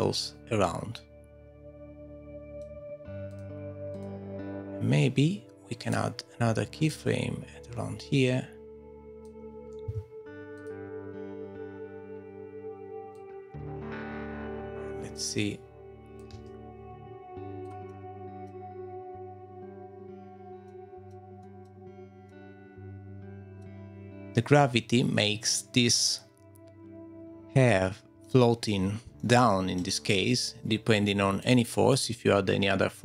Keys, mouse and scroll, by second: 0.1 middle click, 3.3 click, 3.9 click, 6.1 click, 8.1 click, 9.8 g, 13.1 click, 16.3 space, 17.6 click, 17.9 middle click, 20.7 middle click, 21.4 middle click, 27.7 middle click, 29.1 middle click, 31.4 click, 32.4 click.